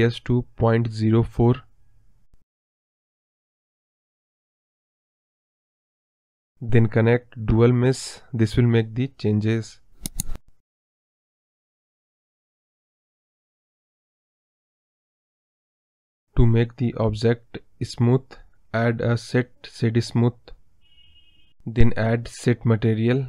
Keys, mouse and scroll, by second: 0.9 click, 1.3-3.7 scroll down 2, 4.1 scroll up 4, 4.2-4.9 scroll down 3, 5.2 click, 9.2-9.6 scroll up 4, 9.6 click, 9.9-10.9 middle drag, 10.9 m, 11.5 m, 12.2 scroll down 3, 12.4 middle click, 13.0 KP_1, 13.5-14.0 scroll up 2, 14.5 m, 14.8 m, 15.8-16.8 scroll up 13, 16.0 middle click, 21.1-21.8 scroll down 16.